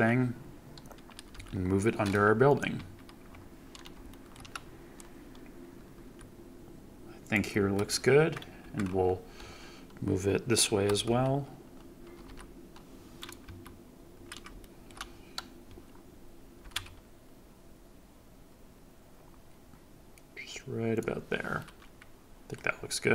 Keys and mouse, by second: 1.3 g, 2.7 KP_Decimal, 4.0 shift+middle drag, 6.0 g, 7.2-8.2 drag, 8.3 KP_1, 10.6 g, 11.0 c, 12.2 x, 13.4 KP_Decimal, 14.5 shift+middle drag, 16.5 g, 16.7 x, 20.9-22.5 drag.